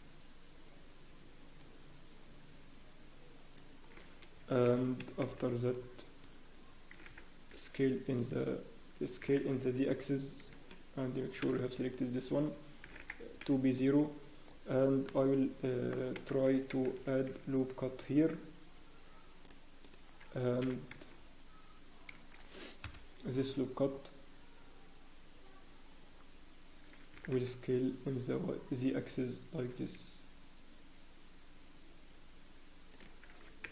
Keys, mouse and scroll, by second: 11.4 s, 11.4 b, 14.2 scroll up 1, 14.2 s, 14.7 scroll down 1, 15.0 middle click, 15.0-16.1 scroll up 1, 16.3 shift+z, 17.3 ctrl+r, 17.3-18.0 scroll down 2, 22.9 g, 22.9 KP_1, 23.9-24.5 scroll up 1.